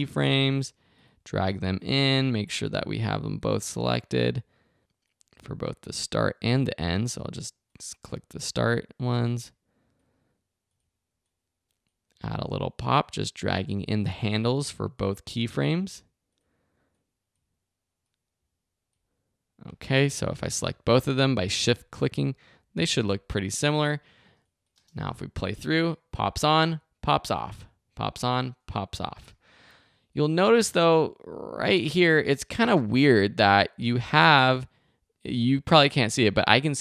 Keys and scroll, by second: 24.7 space, 29.1 space.